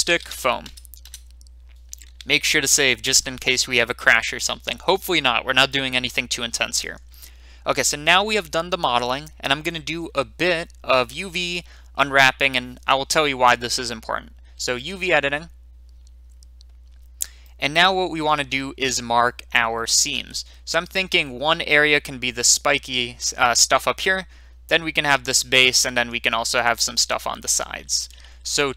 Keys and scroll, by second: 0.0-0.6 typing, 0.6 Return, 1.0 Return, 6.2 typing.